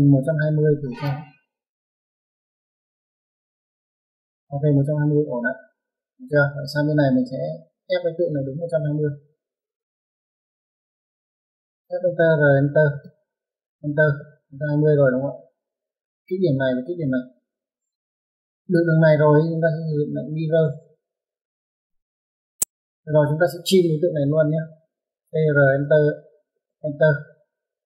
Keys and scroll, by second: 3.7 Escape, 6.3 Escape, 8.4-9.4 typing, 10.6 space, 19.0 Escape, 21.6-23.1 typing, 24.2 space.